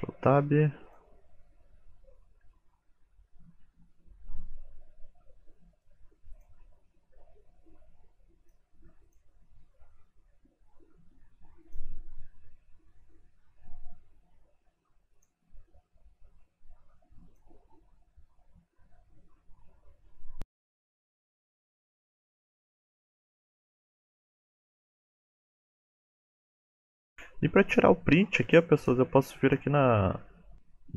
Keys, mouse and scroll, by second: 0.0 shift+middle click, 0.8 click, 1.7 g, 6.3 click, 6.9 r, 7.7 click, 8.1 r, 10.2 click, 10.5 g, 12.6 click, 12.9 r, 14.2 scroll down 3, 14.8 shift+click, 14.8-15.2 scroll down 5, 15.2 click, 15.6 KP_Decimal, 16.0-16.5 scroll down 6, 16.1 middle click, 16.5 r, 16.8 middle click, 17.1 r, 18.8 r, 19.4 shift+middle click, 19.8-20.5 scroll down 9, 20.0 middle click, 20.5 click, 21.0 KP_Decimal, 21.4 middle click, 21.8 middle click, 22.1 middle click, 22.3 click, 22.5 middle click, 22.8 r, 23.4 click, 23.8 r, 24.1 middle click, 24.7 click, 24.9 middle click, 25.5 middle click, 25.5 r, 25.9-26.3 scroll down 8, 26.3 KP_1, 26.6 shift+middle click, 28.4 click, 28.8 click.